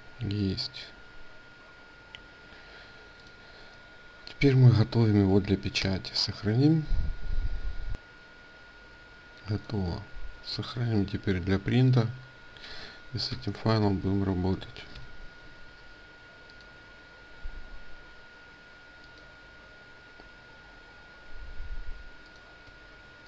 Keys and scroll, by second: 5.5 ctrl+s, 9.9 ctrl+shift+s.